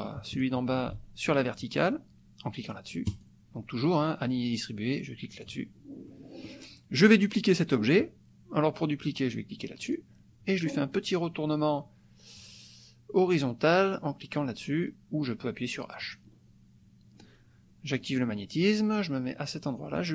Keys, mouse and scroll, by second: 0.3 shift+click, 3.2 click, 5.4 click, 6.1 click, 9.8 click, 12.5 click, 16.1 click, 18.1 click, 20.0-20.1 drag.